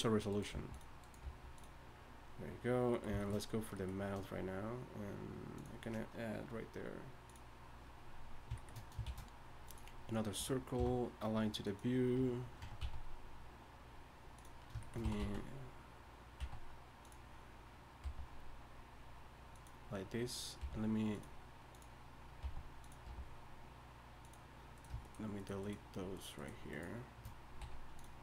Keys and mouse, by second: 0.5 g, 1.2 g, 9.0 shift+a, 10.8 F6, 12.2 Tab, 12.6 Tab, 12.8 s, 15.0 s, 18.0 g, 20.6 g, 22.4 g, 23.1 g, 25.7 shift+right click, 27.6 x.